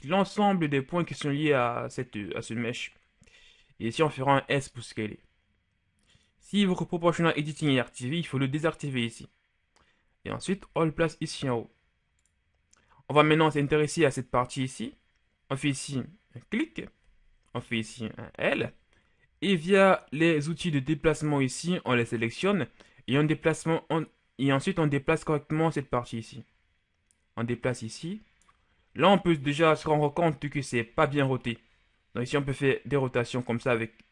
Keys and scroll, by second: 4.3 s, 10.5 g, 17.5 l, 29.9 KP_1, 33.0 r.